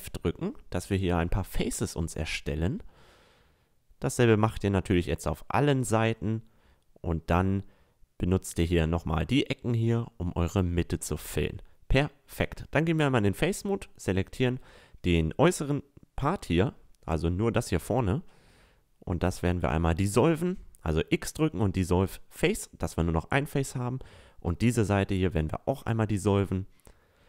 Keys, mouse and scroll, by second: 0.0 f, 3.0 f, 3.7 a, 6.2 f, 6.6 click, 7.2 click, 7.4 a, 11.0 f, 11.2 a, 15.2 a, 18.2 x, 20.9 Tab, 22.1 click, 22.4 Tab, 23.2-24.4 drag, 24.4 x, 25.0-25.7 drag.